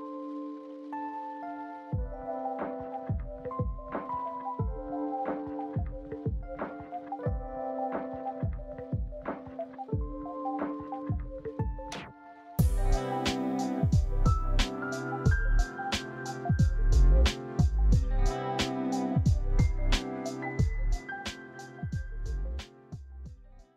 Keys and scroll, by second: 13.1 typing, 13.2 Return, 14.6 Escape.